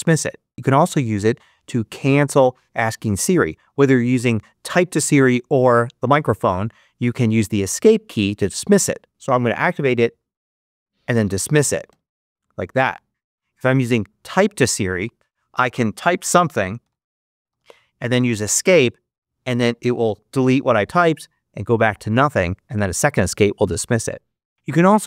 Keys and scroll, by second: 16.1-18.1 typing, 18.1 Escape.